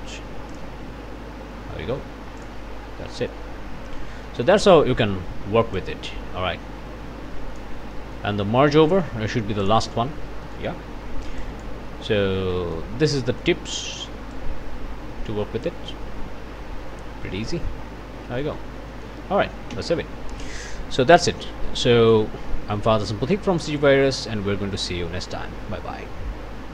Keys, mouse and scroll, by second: 0.5 ctrl+click, 2.5 click, 2.8 scroll down 2, 3.1 click, 3.4-3.9 scroll down 2, 4.3 click, 5.8-7.8 drag, 8.0 click, 8.3-8.6 scroll down 1, 8.9 click, 9.6 click, 10.5 click, 10.5 scroll down 1, 11.4 click, 11.9 click, 12.2 scroll up 2, 12.9 scroll down 2, 13.2 click, 14.3-15.9 drag, 17.7 scroll up 2, 18.6 scroll down 2, 18.9 click, 19.2 ctrl+scroll up 1, 19.7 ctrl+s, 21.5 scroll down 2, 22.4 scroll up 2, 22.4 click, 22.8 middle click.